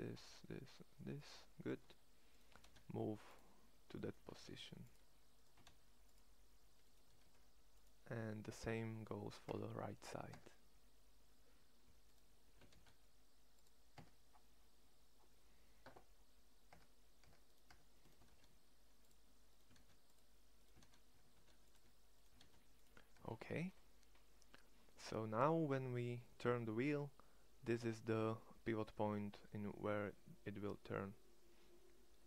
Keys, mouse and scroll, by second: 2.5 shift+s, 4.3 shift+s, 5.5 shift+s, 7.1 shift+s, 9.4 Tab, 10.4 Tab, 12.6 shift+s, 13.9 Tab, 16.8 Tab, 17.2 Tab, 17.7 Tab, 18.1 shift+s, 19.6 shift+s, 21.2 shift+s, 22.3 shift+s, 23.1 Tab, 29.9 middle click.